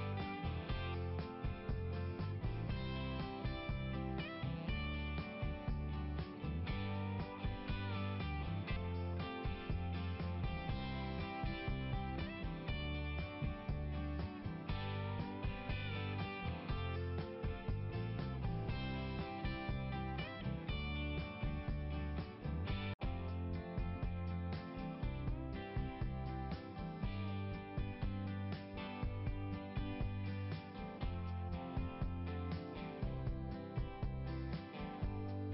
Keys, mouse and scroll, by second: 1.2 click, 11.9 click, 24.2 click, 25.7 click, 27.0 click, 28.2 click, 29.0 click, 29.2 click, 33.2 click.